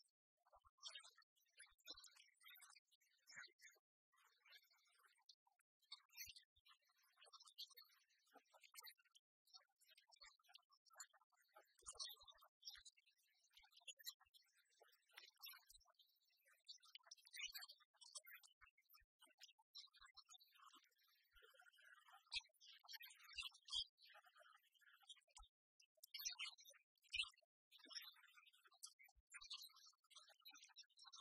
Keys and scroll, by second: 30.3 ctrl+alt+shift+e.